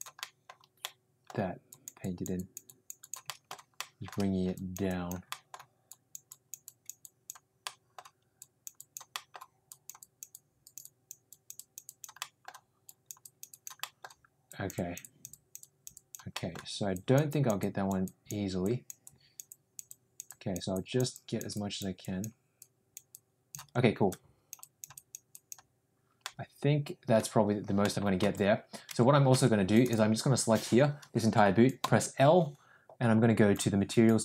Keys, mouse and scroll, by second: 0.2 middle click, 0.8 middle click, 1.6 click, 2.0 click, 2.4 click, 2.7 click, 3.0 click, 3.3 shift+middle click, 4.5 click, 4.9 click, 5.3 middle click, 5.8 click, 6.3 click, 6.6 click, 7.0 click, 7.6 middle click, 8.3 click, 8.7 click, 9.1 middle click, 9.6 click, 9.9 click, 10.3 click, 11.2 click, 11.8 click, 12.1 middle click, 12.8 click, 13.2 click, 13.4 click, 13.8 middle click, 14.4 click, 15.0 click, 15.6 click, 16.3 middle click, 16.9 click, 17.3 click, 17.6 click, 18.0 click, 18.6 click, 19.0 click, 19.5 click, 19.9 click, 20.2 click, 20.7 click, 21.1 click, 21.5 click, 22.0 click, 22.6 click, 23.1 click, 24.0 click, 24.9 click, 25.3 click, 26.2 middle click, 27.8 middle click, 28.2 Tab, 28.9 Tab, 29.3 Tab, 29.7 click, 31.8 l.